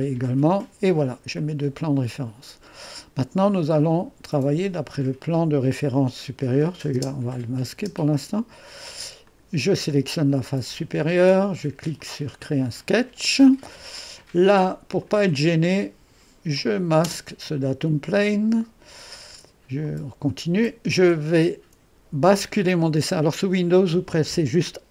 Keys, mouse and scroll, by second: 1.0-3.0 drag, 6.7 click, 7.0 space, 7.9 space, 9.3-13.0 drag, 15.0-18.3 drag, 17.1 space, 19.9-23.0 drag.